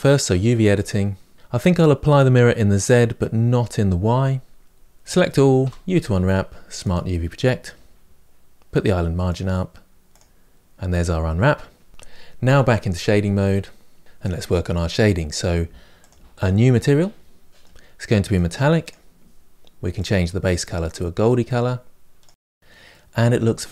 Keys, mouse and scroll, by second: 0.5 click, 1.3-4.6 shift+middle drag, 4.6 Tab, 11.9 Tab, 12.8-16.8 drag, 18.2-20.0 drag, 22.7-23.7 middle drag.